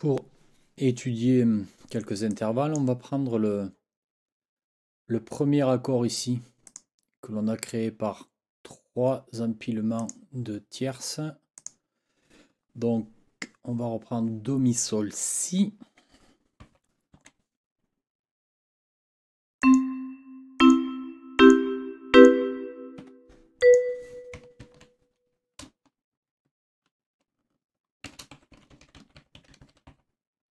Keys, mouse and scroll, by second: 2.3 click, 2.6 click, 6.7 click, 10.0 click, 11.6 click, 16.6 n, 17.1 KP_7, 19.6 click, 20.6 click, 21.4 click, 22.1 click, 23.0 Escape, 23.6 click, 24.6 ctrl+t, 27.8-30.5 typing.